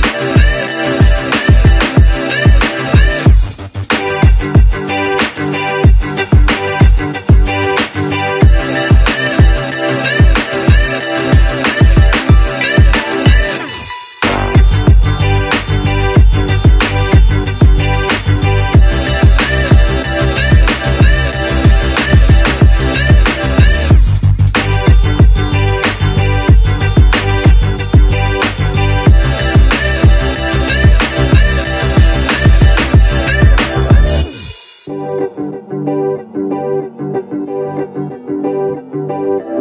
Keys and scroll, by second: 30.9 Tab, 31.5 Tab, 35.8 Tab.